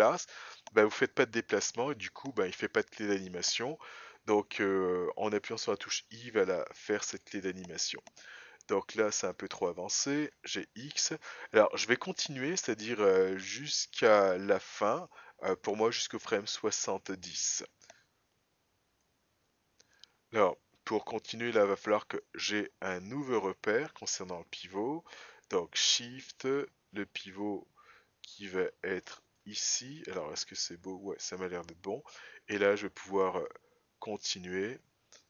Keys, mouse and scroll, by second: 6.3 click, 10.2 g, 22.3-25.7 right drag, 26.5 shift+right click, 33.6 click.